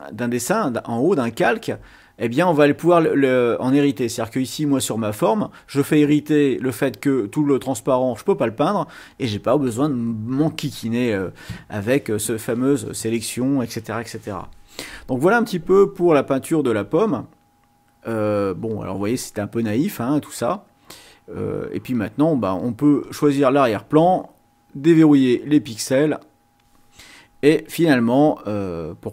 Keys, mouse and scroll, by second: 4.7 click, 16.6 ctrl+scroll down 2, 17.2 ctrl+scroll down 3, 21.0-22.6 drag, 23.0 click, 24.0 click, 25.7 click.